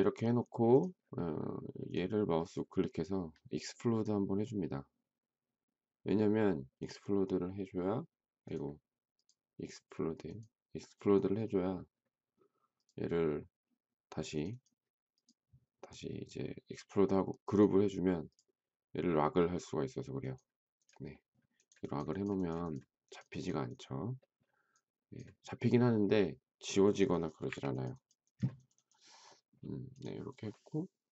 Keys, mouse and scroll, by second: 27.5 Delete.